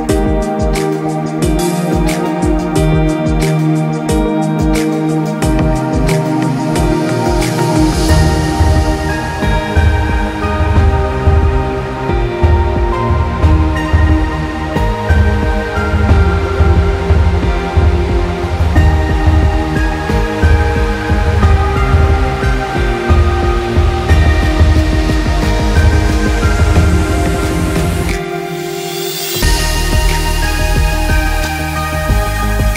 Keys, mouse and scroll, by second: 5.2 space, 5.5 click, 5.6 space, 7.0 click, 7.2 space, 8.1 click, 15.2 click, 28.6 click, 29.2 space, 29.6 click, 29.7 space, 30.3 alt+scroll up 1, 31.8 click.